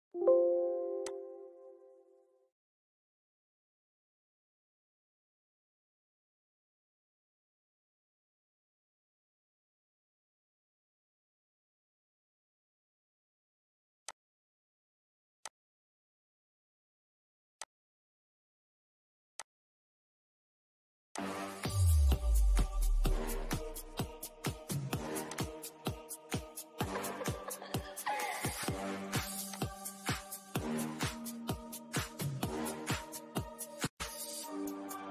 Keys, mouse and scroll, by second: 3.6-3.9 scroll down 1, 4.2 middle click, 4.8 scroll down 1, 5.5-9.6 shift+middle drag, 9.6-13.0 shift+middle drag, 13.0 click, 16.5 click, 21.3-24.2 shift+middle drag, 24.2 click, 28.5 click, 29.3 scroll down 1.